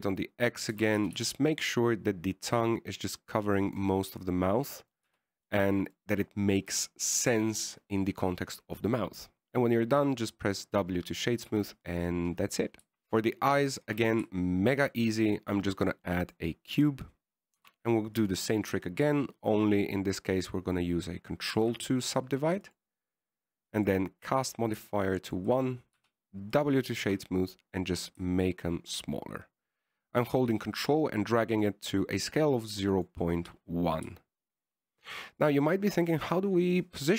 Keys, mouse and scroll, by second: 2.1 s, 5.2 middle click, 6.4 w, 7.1 middle click, 8.0 KP_1, 12.8 a, 13.6 shift+s, 16.0 shift+a, 18.9 g, 22.9 ctrl+2, 24.0 click, 26.0 click, 27.3 w, 28.4 s, 36.7 right click.